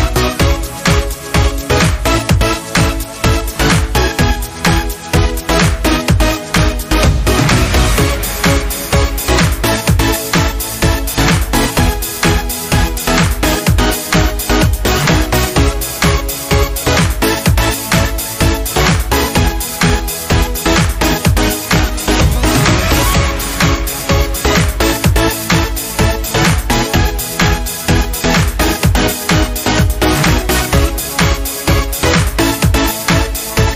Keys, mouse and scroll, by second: 0.3 click, 1.4 alt+scroll up 1, 2.0 space, 2.2 click, 2.3 space, 4.0 click, 4.2 space, 5.0 super+[, 5.6 click, 6.1 right click, 10.6 click, 11.9 right click, 13.8 click, 15.2 right click, 17.0 click, 18.2 right click, 20.8 click, 22.8 click, 23.4 scroll up 1, 24.1 scroll down 1, 26.2 scroll up 1, 27.0 scroll down 1, 28.6 click, 30.3 Down, 31.5 click, 31.8 Down, 32.5 click, 33.1 scroll up 1.